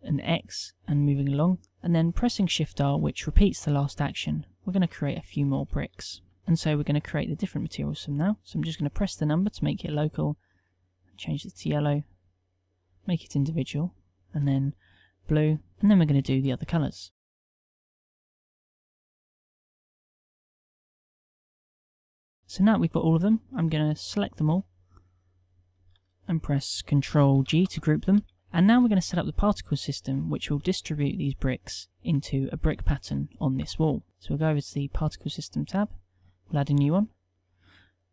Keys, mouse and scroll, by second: 4.8 shift+r, 5.2 shift+r, 5.6 shift+r, 6.2 shift+r, 15.7 n, 27.5 ctrl+g, 32.8 KP_1.